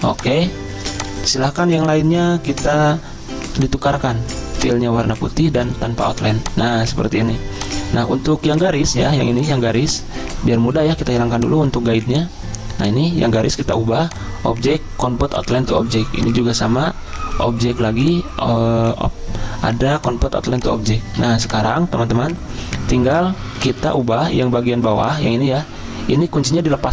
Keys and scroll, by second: 21.2 z.